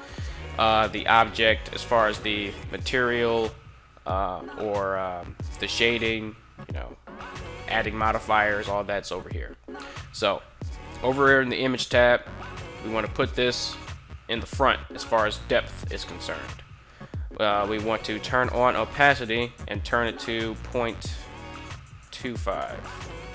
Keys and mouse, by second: 14.3 click, 17.9 click, 19.1-23.3 drag.